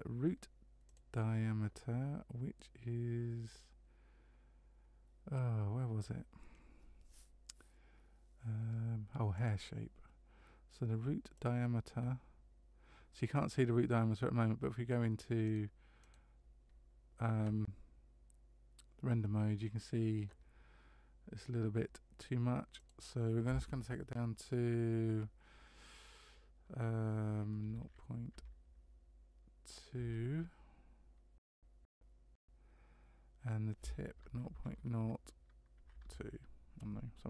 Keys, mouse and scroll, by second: 0.9 click, 9.3 click, 11.3 click, 16.0 click, 22.8 click.